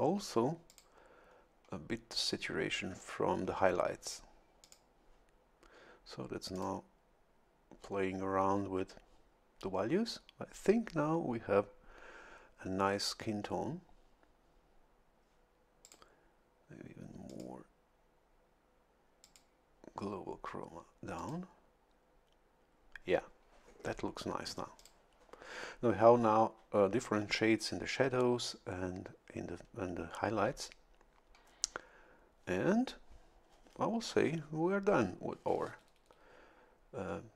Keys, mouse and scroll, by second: 0.7 click, 4.6 click, 6.5 click, 15.8 click, 17.3 click, 19.2 click, 21.2 click, 24.8 click.